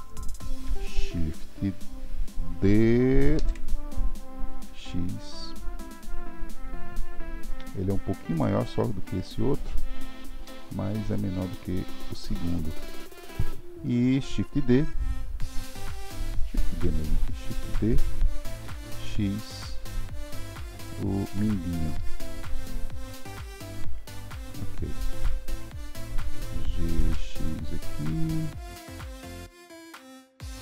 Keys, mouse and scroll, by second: 3.3 shift+d, 17.7 shift+d, 30.1 g.